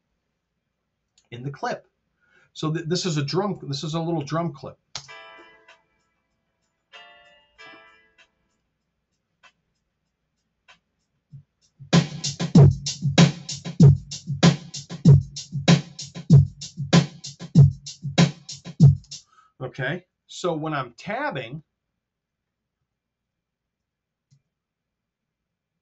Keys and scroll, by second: 3.6 r, 4.8 space, 18.9 space, 20.2 t, 23.8 Tab.